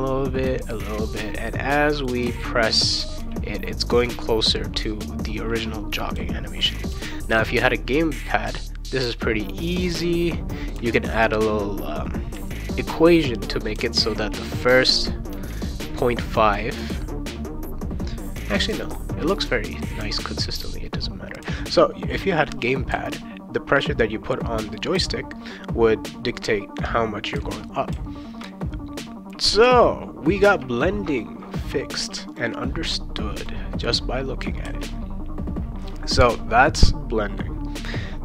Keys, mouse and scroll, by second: 0.0-3.9 typing, 6.1 c, 6.9 c, 7.6 v, 8.5 c, 9.9 c, 10.8 v, 13.7 v, 14.6 c, 15.3 v, 18.4 v, 18.7 c, 19.3 v, 20.0 v, 21.4 v, 22.9 c, 24.9 v, 27.4 v, 32.3 click, 33.4 click, 34.6 ctrl+s.